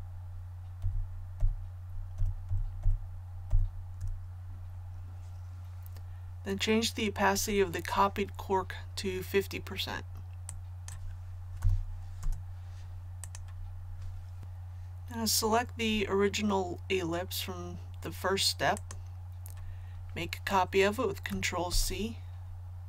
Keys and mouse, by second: 0.0 Down, 0.8 Down, 1.4 Down, 2.1 Down, 2.5-4.0 Down, 10.5 click, 11.6 KP_5, 12.2 Tab, 13.2 click, 21.7 ctrl+c.